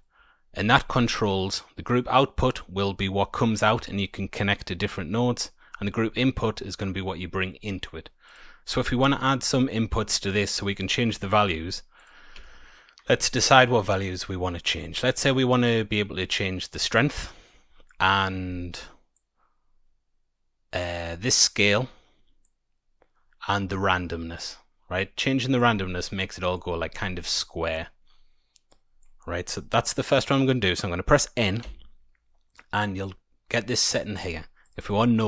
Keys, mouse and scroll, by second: 0.7 Tab, 8.2 click, 10.8-11.5 scroll up 5, 11.9 click, 12.3 Tab, 13.2 click, 13.6 middle click, 14.0-14.9 scroll down 2, 14.9-16.2 scroll up 2, 16.9 click, 19.1 click, 22.4 click, 26.0 middle click, 26.8-27.4 scroll up 3, 27.4 middle click, 28.6 click, 31.6 n, 34.6 click.